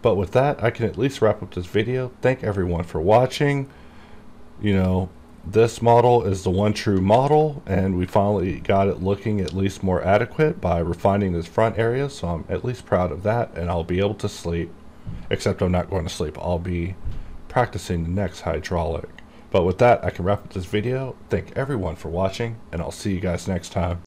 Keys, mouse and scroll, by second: 4.9 click, 7.3 ctrl+s.